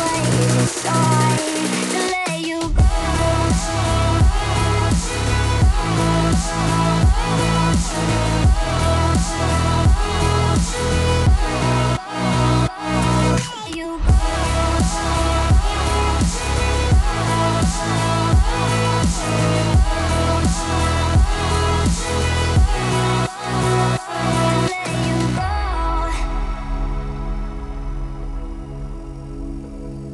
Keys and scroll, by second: 18.5 t, 25.2 p, 27.3 p.